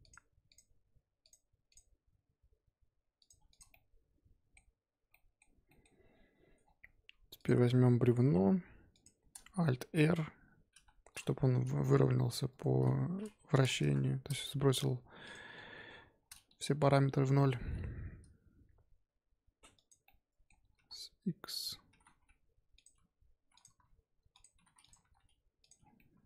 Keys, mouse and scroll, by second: 0.5 click, 0.7 g, 1.7 click, 1.9 g, 3.5 click, 3.7-5.8 middle drag, 5.8 scroll up 1, 6.0-6.8 scroll down 5, 6.8-7.2 scroll up 5, 7.3 click, 8.2 shift+d, 9.7 alt+r, 10.7 KP_1, 11.6 r, 12.7 r, 14.8 g, 15.5 scroll down 3, 15.7 KP_7, 15.9-17.6 scroll up 7, 17.6 g, 20.0-20.5 middle drag, 20.5 scroll up 1, 20.7 s, 21.8 s, 22.9 g, 23.8 s, 24.5 g, 24.9 s, 25.7 scroll down 5, 25.9-26.2 middle drag.